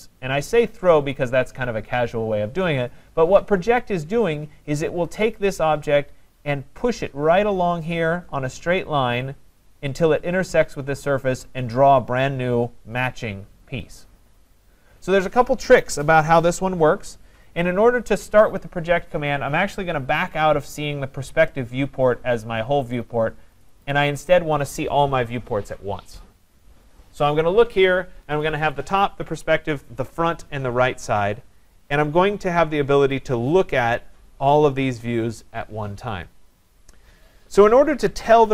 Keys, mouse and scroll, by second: 23.6 click, 23.9 click, 30.1-30.7 scroll down 10, 31.7-33.2 scroll down 12, 33.2-35.5 scroll up 1, 37.5 scroll.